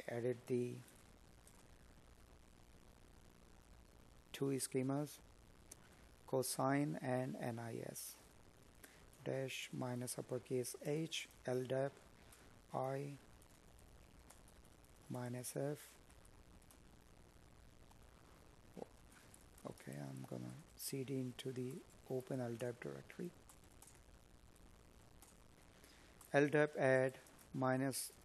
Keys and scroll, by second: 2.5 space, 3.6 space, 8.7 space, 9.2 space, 13.4 space, 21.1 space, 26.4 space.